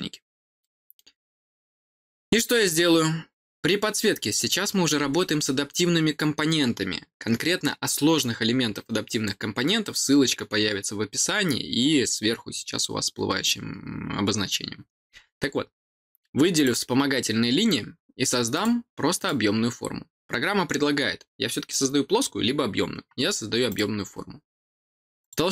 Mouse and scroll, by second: 0.5 middle click, 16.5 click, 18.5 click, 19.1 click, 23.6 click, 25.1 click.